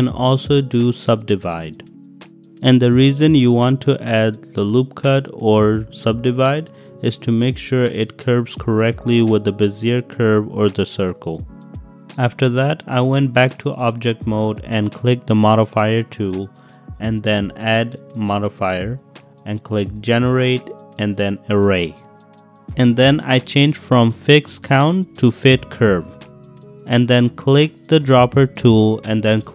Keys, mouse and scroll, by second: 0.3 click, 1.2 s, 2.8 click, 3.5 g, 3.9 z, 4.8 click, 5.0-5.5 drag, 5.7 s, 7.2 g, 7.4 z, 8.4-9.2 drag, 9.5 g, 9.6 y, 10.2 x, 11.3 drag, 11.5-12.0 middle drag, 13.2 middle drag, 13.8 middle drag, 15.6 click, 17.8 click, 18.9-21.8 drag, 24.1-25.5 drag, 26.0-26.4 middle drag, 28.3 click.